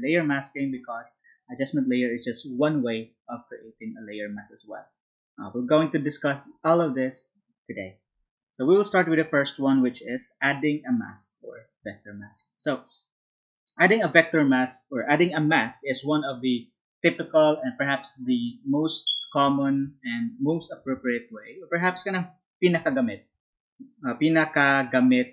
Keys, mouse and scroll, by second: 9.1 Up, 12.0 Down.